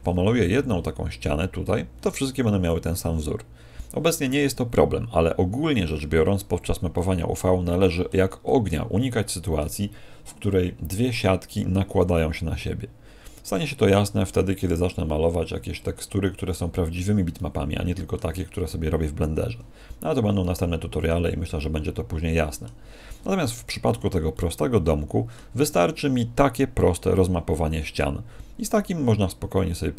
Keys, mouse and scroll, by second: 6.9 middle click, 8.4 middle click, 17.3 middle click, 20.3 middle click, 21.5 middle click, 23.8 a, 24.3 middle click.